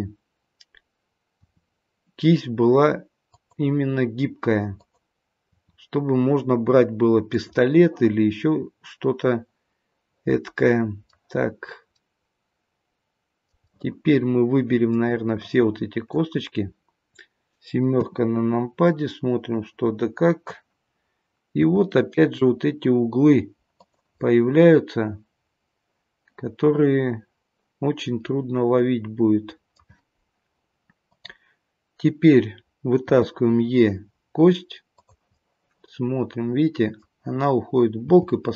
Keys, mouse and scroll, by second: 1.4 e, 4.8 click, 5.6 e, 8.6 middle click, 11.5-13.4 scroll up 3, 11.9 middle click, 13.6 middle click, 15.4 click, 17.9 KP_7, 18.9 middle click, 21.6 r, 24.2 middle click, 31.0 click, 33.1 e, 35.3 middle click, 38.0 g.